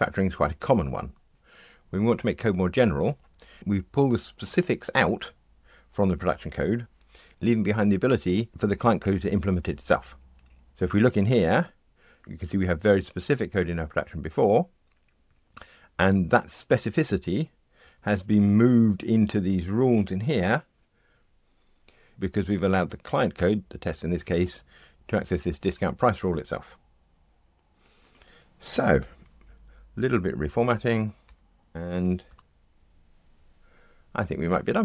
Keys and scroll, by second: 17.8 Escape, 29.0 alt+Return, 32.2 ctrl+r.